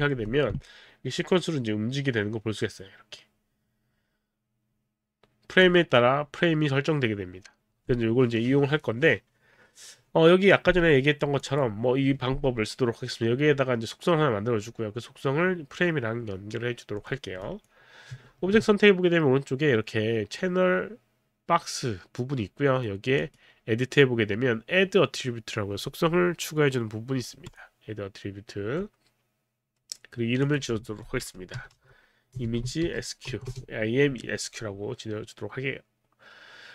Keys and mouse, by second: 1.1 click, 11.4 click, 17.0 click, 17.4 click, 18.3 ctrl+a, 18.6 ctrl+a, 23.2 click, 27.5 click, 30.5 click, 31.3-33.8 typing, 33.8 Return, 34.3 Return.